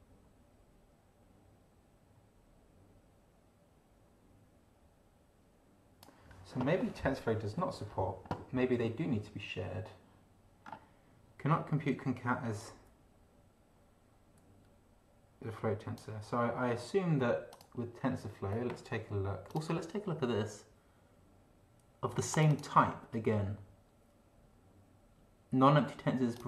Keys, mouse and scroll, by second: 10.7 scroll down 2, 12.6-16.2 drag, 17.5 click, 19.5 click, 22.3 click, 26.3 click.